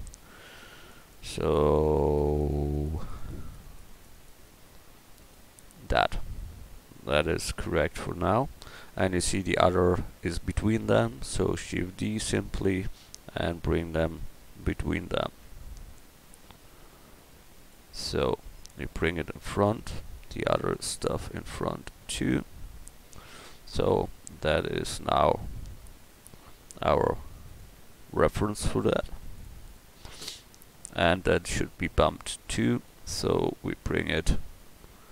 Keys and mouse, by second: 0.8-6.9 drag, 11.9 shift+d, 18.3-19.7 middle drag, 23.1 KP_1, 26.1 right click, 31.5-33.1 drag.